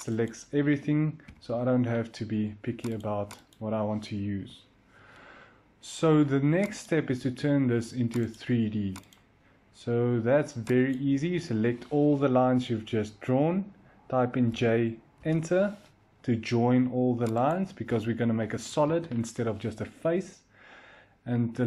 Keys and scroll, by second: 1.1 Delete, 4.3 Delete, 14.3 j, 15.1 Return, 18.4 Escape, 18.8 Escape.